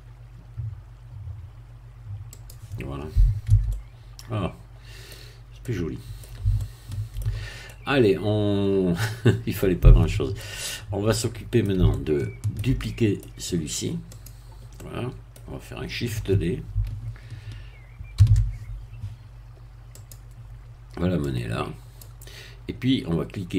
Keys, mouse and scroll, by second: 2.3-3.5 drag, 3.5 Tab, 3.7-5.2 middle drag, 5.2 scroll down 2, 5.6 middle click, 6.5 shift+middle click, 7.7-10.5 middle drag, 10.5-11.1 scroll down 1, 11.1 middle click, 11.9 shift+middle click, 13.2 middle click, 14.1 click, 14.7 middle click, 15.4 scroll down 1, 18.2 shift+d, 20.0 click, 21.3-22.5 drag.